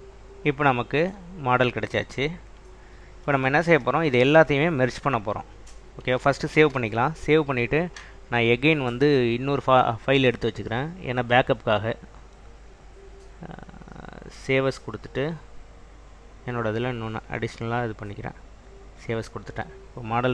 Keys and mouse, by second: 2.5 click, 4.2 shift+drag, 6.7 ctrl+s, 9.0-10.5 drag, 11.3-15.4 drag.